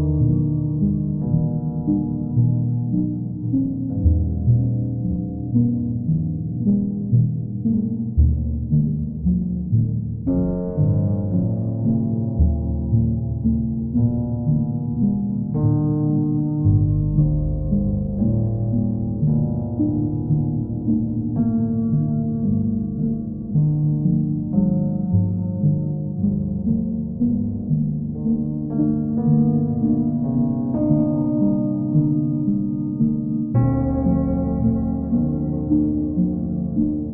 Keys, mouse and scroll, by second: 0.5 ctrl+click, 2.4 click, 3.0 ctrl+click, 4.2 alt+click, 5.1 ctrl+click, 5.5 alt+click, 7.7 click, 8.4 ctrl+click, 9.5 alt+click, 12.1 alt+click, 13.5 ctrl+click, 13.9 alt+click, 17.6 click, 18.1 ctrl+click, 19.0 ctrl+click, 19.4 ctrl+click, 20.8 click, 21.2 ctrl+click, 25.5 ctrl+click, 27.2 ctrl+click, 27.7 ctrl+click, 29.5 ctrl+click, 30.7 alt+click, 33.7 click, 34.2 ctrl+click, 35.9 click, 36.3 shift+click.